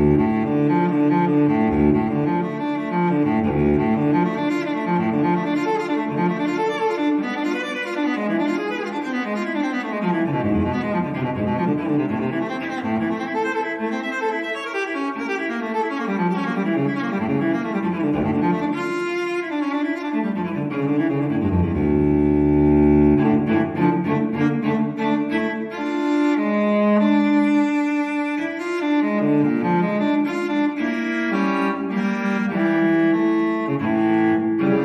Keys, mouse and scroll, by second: 0.0-0.4 scroll down 1, 0.5-2.1 drag, 3.1 click, 3.7 ctrl+click, 4.4 ctrl+click, 4.9 ctrl+click, 7.0 click, 8.5-8.9 scroll down 1, 8.9-9.3 scroll up 1, 9.3 scroll down 2, 9.4 scroll up 2, 9.7-10.3 scroll down 1, 12.3 click, 13.6 click, 15.8 click, 16.6 4, 17.7 click, 18.3 click, 18.8-19.2 scroll down 2, 19.3-21.3 drag, 21.3 0, 22.1-22.5 scroll down 1, 22.7 click, 24.3 click, 24.9 space, 25.8-26.2 scroll down 2, 26.2-26.6 scroll up 1, 27.1 click, 30.3 click, 32.1 click, 32.6 click, 33.4 click, 34.5 click.